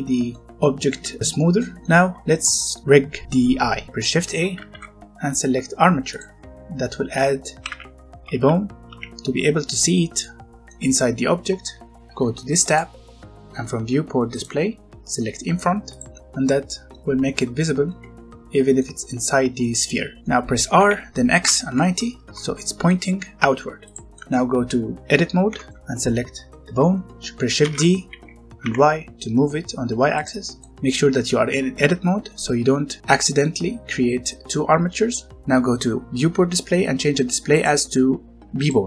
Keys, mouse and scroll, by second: 0.6 shift+middle click, 2.2-2.6 scroll down 1, 2.6 middle click, 3.6 scroll up 1, 4.5 a, 6.1 click, 6.6 scroll down 1, 6.8 middle click, 7.6-8.8 typing, 9.8-10.2 scroll down 1, 10.2 middle click, 12.5 click, 16.2 middle click, 17.7 scroll down 1, 17.8 middle click, 20.7 r, 21.3 x, 21.6 KP_9, 21.8 KP_0, 22.1 KP_Enter, 22.8 middle click, 25.4 Tab, 25.7 middle click, 27.6 d, 28.6 y, 30.1 click, 30.5 middle click, 37.5 click.